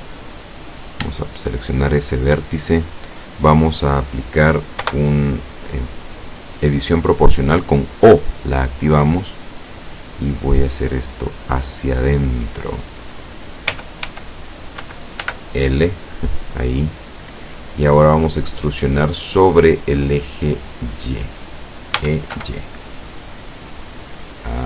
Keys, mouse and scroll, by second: 0.8 right click, 1.6 shift+middle click, 2.6-3.4 shift+scroll up 1, 4.9 o, 8.4-12.4 drag, 13.8 l, 14.9 l, 17.0 scroll down 2, 19.6-21.0 middle drag, 22.0 e, 22.5 y.